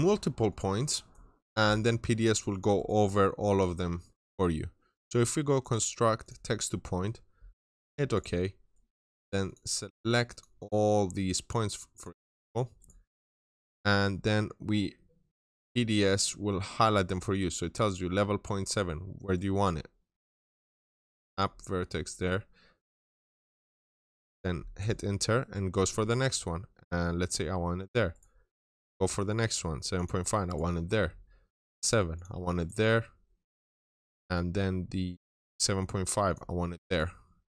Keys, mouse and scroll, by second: 0.3 click, 0.7 right click, 1.3 click, 2.3 double click, 2.6 right click, 3.1 scroll down 1, 3.7 middle click, 5.4 click, 8.0 double click, 8.5 right click, 9.3 click, 12.6 right click, 16.0 scroll up 1, 18.4 middle click, 19.2 right click, 20.0 click, 24.6 right click, 27.1 click, 28.0 right click, 29.8 click, 30.3 right click, 32.0 click, 32.4 right click, 36.1 click, 36.7 right click.